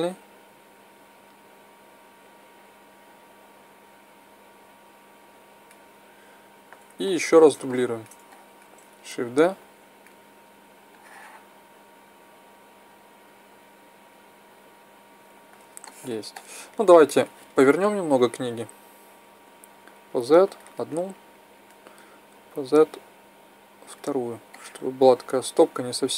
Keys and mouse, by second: 7.0-7.8 middle drag, 9.5 shift+d, 15.7-16.8 middle drag, 16.8-17.2 drag, 18.1-19.7 right drag, 19.9-21.3 drag, 23.2 click, 24.4-25.8 middle drag.